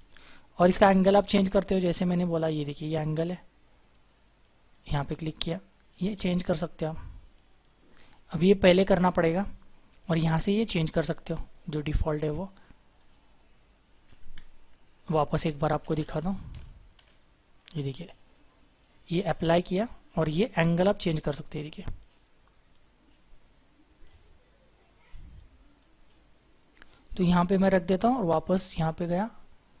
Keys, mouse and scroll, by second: 1.2-2.2 scroll down 1, 12.3-12.9 scroll up 1, 12.9-13.6 scroll down 1, 13.6-14.3 scroll up 1, 15.2 ctrl+z, 15.5 ctrl+z, 15.8 ctrl+z, 15.9 ctrl+z, 16.0 ctrl+z, 16.5 ctrl+z, 16.9 ctrl+z.